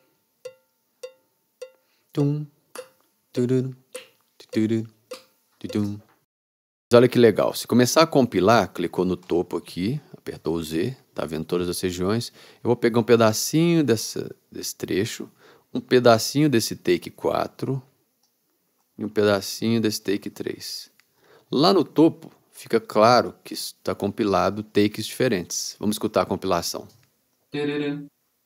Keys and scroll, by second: 0.0 super+r, 0.6 r, 5.9 space.